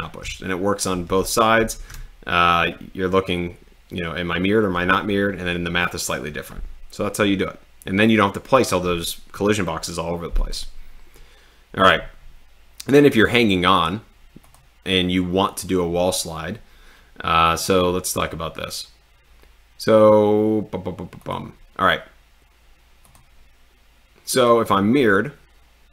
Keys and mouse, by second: 0.4 d, 1.6 a, 1.9 q, 21.3 click.